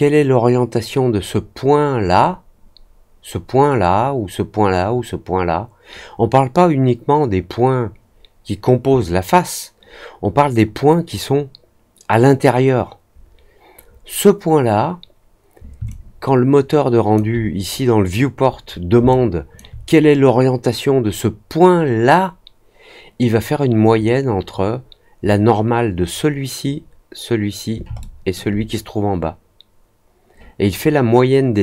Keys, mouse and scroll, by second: 15.8-17.1 alt+drag, 19.0 alt+click, 27.9 alt+middle click.